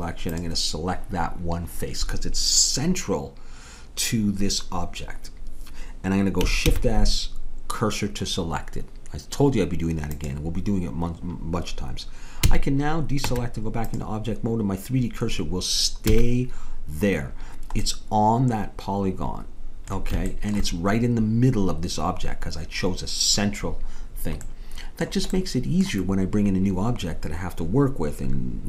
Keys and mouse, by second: 6.6 shift+s, 12.5 a, 13.2 Tab, 16.1 a, 17.9 middle click, 20.3-23.7 middle drag, 24.5-28.6 middle drag.